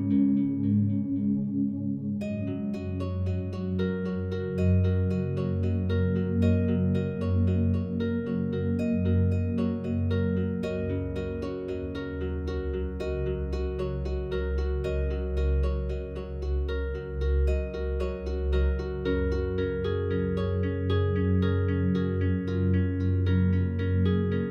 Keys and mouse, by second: 0.1 click, 0.6 click, 4.4 click, 5.5 click, 6.1-6.4 drag, 6.7-8.4 drag, 8.4 click, 10.0 click, 12.0 click, 13.4 click, 14.4 click, 14.8 click, 17.9 click, 19.0-20.1 drag, 20.6 click, 22.0 click.